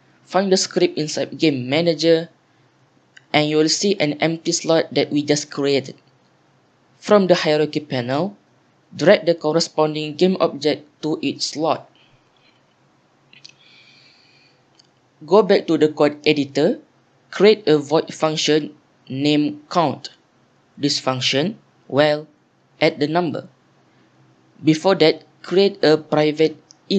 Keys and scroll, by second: 18.5 Return, 18.9-19.7 typing, 20.7 Tab, 21.7-24.3 typing, 24.4 Return, 25.5 Return, 25.8-26.9 typing.